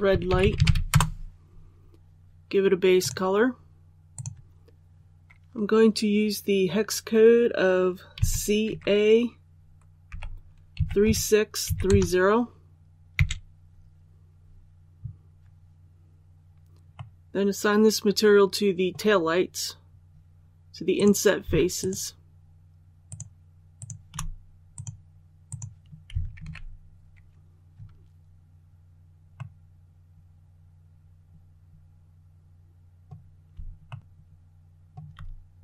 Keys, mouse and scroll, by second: 0.0-0.5 typing, 0.8 Return, 2.9 click, 8.0 c, 10.6 KP_3, 16.8-19.2 middle drag, 19.6-20.8 scroll up 1, 20.8 right click, 21.7 shift+right click, 22.9 shift+right click, 23.6 shift+right click, 24.6 click, 26.3 alt+a, 29.2 middle click, 30.2-33.2 middle drag, 33.7 shift+middle click.